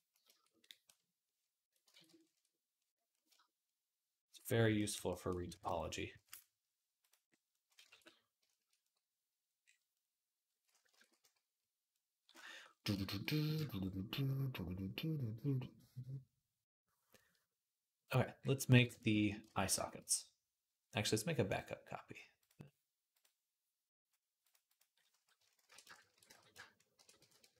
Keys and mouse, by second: 1.8 ctrl+z, 5.4 ctrl+Tab, 7.4-11.0 ctrl+drag, 7.8 ctrl+s, 11.0-12.8 middle drag, 12.8-16.1 drag, 18.2-19.3 middle drag, 19.3-27.5 ctrl+shift+drag, 19.4 ctrl+s.